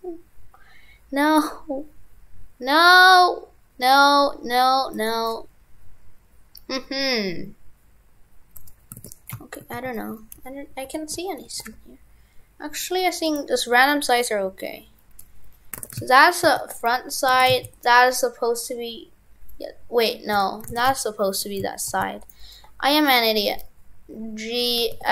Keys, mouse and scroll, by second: 9.0 shift+f, 15.8 shift+f, 17.5 shift+f, 20.7 shift+f.